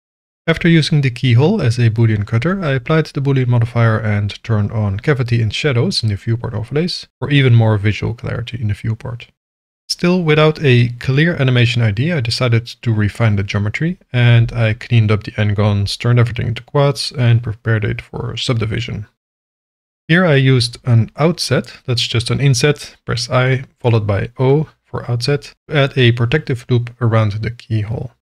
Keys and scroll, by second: 1.1 ctrl+a, 2.4 ctrl+a, 9.3 Tab, 9.4 j, 10.4 ctrl+r, 13.5 j, 15.8 j, 17.3 j, 19.4 i, 19.9 o, 25.7 alt+a.